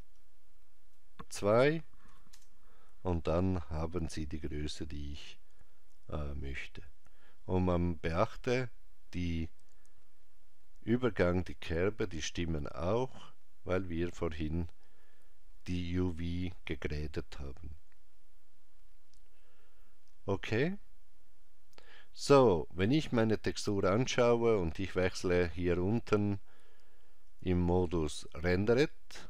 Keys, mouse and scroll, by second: 0.2 click, 27.3 click.